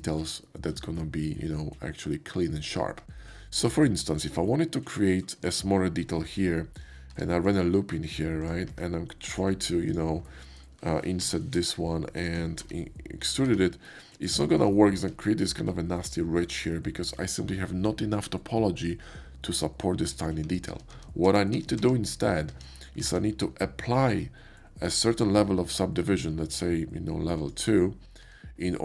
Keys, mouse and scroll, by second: 3.5-6.1 shift+middle drag, 7.1 ctrl+r, 7.4 click, 8.4 click, 8.7 Tab, 9.3 click, 9.8 ctrl+click, 10.2 ctrl+middle click, 12.6 e, 13.5 Tab, 14.2 shift+middle click, 14.6 shift+middle click, 14.9 shift+middle click, 16.7 shift+middle click, 20.1 ctrl+z, 20.4 ctrl+z, 21.0 ctrl+z, 22.4 Tab, 24.8 ctrl+click, 27.3 click, 28.2 Tab.